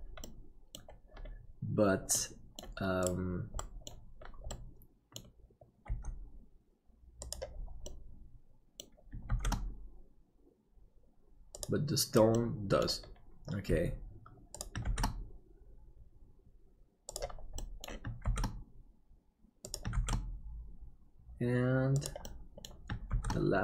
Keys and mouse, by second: 0.4 middle click, 2.3 middle click, 3.6 middle click, 4.5 middle click, 5.9 g, 8.0 middle click, 9.3 shift+d, 12.5 middle click, 13.7 g, 14.8 shift+d, 17.7 middle click, 18.3 shift+d, 22.4 middle click, 23.1 shift+d.